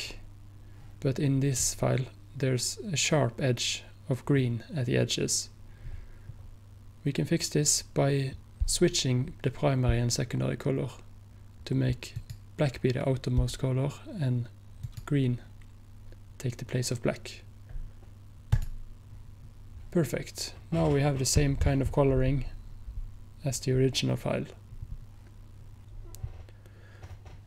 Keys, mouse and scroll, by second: 12.2 click, 16.8 click, 18.6 click, 25.8 click.